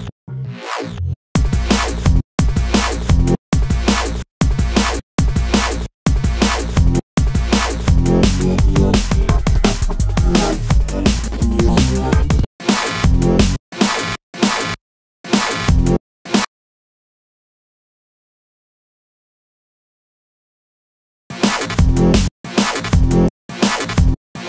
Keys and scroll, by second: 4.3 space, 7.5 super+i, 10.8 super+d, 11.8 super+space, 17.6 super+BackSpace, 18.2 super+z, 19.3 super+BackSpace.